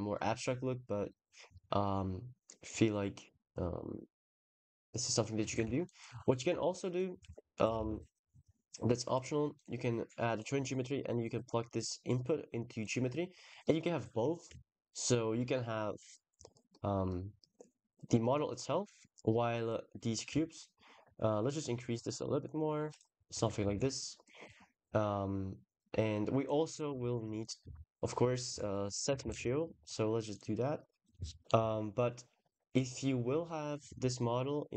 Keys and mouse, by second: 1.3 drag, 5.5 ctrl+s, 6.5 shift+a, 9.4 click, 14.5 shift+middle click, 14.9 shift+middle click, 16.5-18.1 middle drag, 20.1-22.8 shift+drag, 23.5 ctrl+s, 23.6-24.0 middle drag, 26.2 drag, 26.5 click, 26.8 shift+a, 30.8 click, 31.4 click.